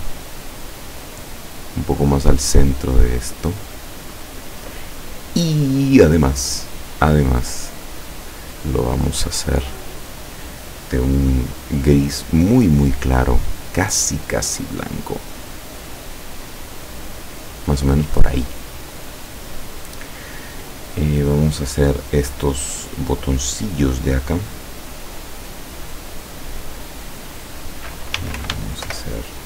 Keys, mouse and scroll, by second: 0.8 click, 6.5 click, 9.4-11.1 drag, 12.1 click, 13.3-17.0 drag, 17.4 click, 19.2-19.6 scroll down 1, 20.7 scroll up 1, 20.9 scroll down 1, 26.0 click, 28.0-29.4 typing.